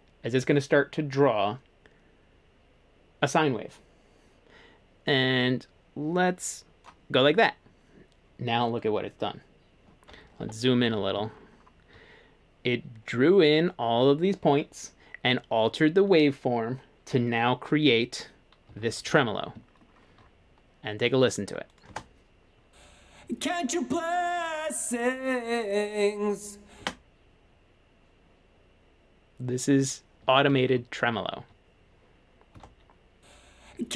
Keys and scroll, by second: 10.4-10.8 typing, 18.7-19.1 typing, 21.9 space, 26.8 space, 30.2 typing, 32.5 space.